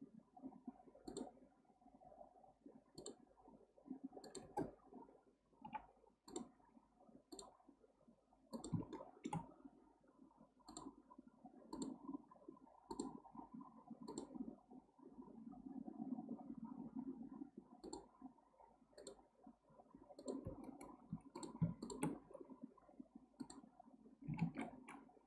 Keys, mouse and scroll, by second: 8.9 shift+middle click, 9.4-10.9 scroll up 1, 21.3 click, 21.8 shift+drag, 22.2 x, 24.4 ctrl+z.